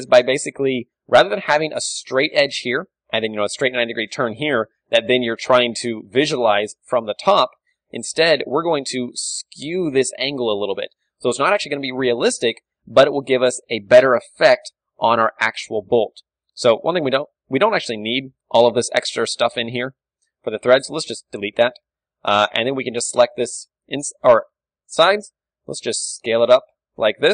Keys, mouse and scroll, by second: 0.4-2.0 middle drag, 0.6 z, 1.2 z, 1.9 d, 2.0-5.0 drag, 5.5-9.6 middle drag, 5.5 d, 6.1 KP_7, 7.3 KP_1, 8.6 ctrl+d, 9.1 ctrl+d, 9.2 ctrl+d, 9.6 ctrl+d, 9.6-11.2 drag, 11.1 ctrl+d, 11.2-12.7 right drag, 12.1 Tab, 12.3 z, 12.7 a, 13.4-15.5 middle drag, 14.9 click, 14.9 KP_1, 15.5 right click, 16.0 click, 16.0-18.1 middle drag, 16.8 a, 17.5 b, 19.0-20.5 middle drag, 19.3 b, 20.9 x, 22.9-25.8 middle drag, 22.9 b, 23.7 z, 25.5 s.